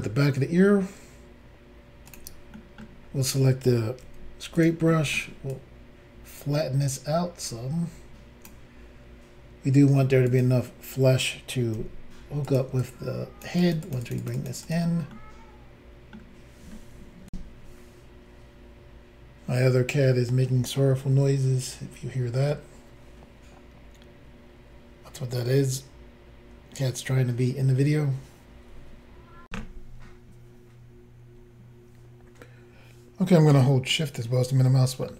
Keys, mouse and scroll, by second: 2.1 click, 2.2 click, 2.6 middle click, 3.0 scroll down 2, 4.3 scroll down 1, 4.6 click, 4.6 f, 4.9 middle click, 5.5 click, 10.3 click, 10.4 click, 11.8 f, 12.5 click, 12.8 click, 13.6 click, 13.7 click, 13.9 click, 13.9 double click, 14.1 click, 14.1 click, 14.2 click, 14.3 double click, 14.4 click, 14.5 click, 14.6 click, 14.7 double click, 15.1 middle click, 17.3 Insert, 29.5 Insert, 29.5 click, 34.0 shift+middle click.